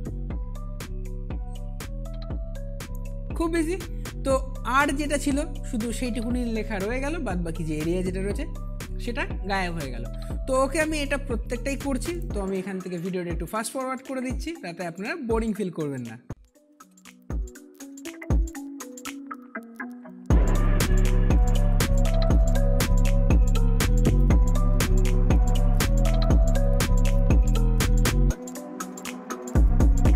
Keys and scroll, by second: 17.9 ctrl+t, 21.6 Return, 22.9 Delete, 23.1 ctrl+d, 28.0 Return, 29.1 Delete, 29.2 ctrl+d.